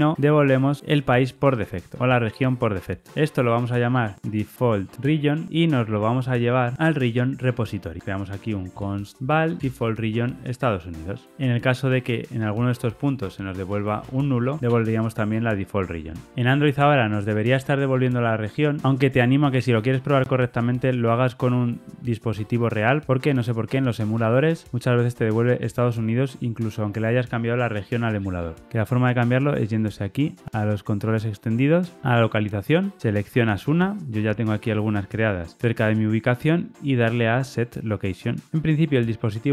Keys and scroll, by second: 3.1 super+x, 9.2 Tab, 11.0 super+[, 11.0 ctrl+alt+Left, 15.9 super+z, 16.3 super+F2, 19.0 ctrl+r, 19.0 shift+F10.